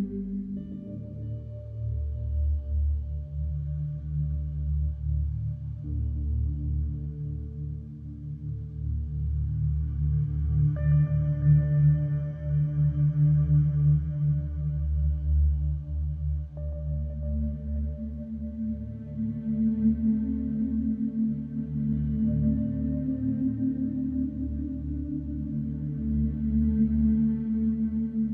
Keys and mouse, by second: 0.0-6.3 ctrl+alt+drag, 6.5 alt+shift+drag, 6.9-7.3 ctrl+alt+drag, 7.4-13.1 drag, 13.4 click, 13.9 click, 14.5 click, 15.2 click, 15.6-28.3 drag, 24.6 ctrl+s.